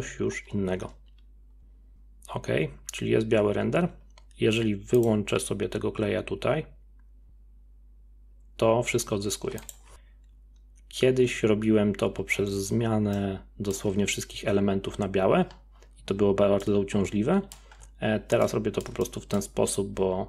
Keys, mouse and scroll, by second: 5.0-7.2 drag, 9.7-11.0 drag, 13.2-14.0 middle drag, 14.0-14.3 scroll down 3, 14.3 z, 15.4-16.6 scroll down 7, 16.6-20.2 middle drag.